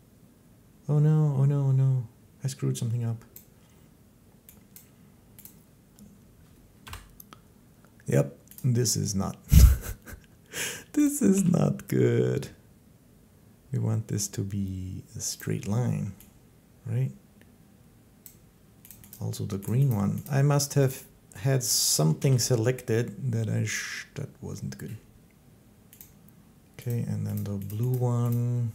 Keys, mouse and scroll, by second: 3.1 right click, 4.6 right click, 5.3 right click, 6.7 Home, 8.4 right click, 10.9 right click, 11.2 g, 15.2 click, 18.0 click, 18.7 right click, 18.9 right click, 19.5 right click, 19.7 right click, 20.1 right click, 20.7 right click, 21.8 right click, 22.0 g, 25.8 click, 26.7 click, 27.2 click, 27.5 click, 27.8 click, 28.1 click.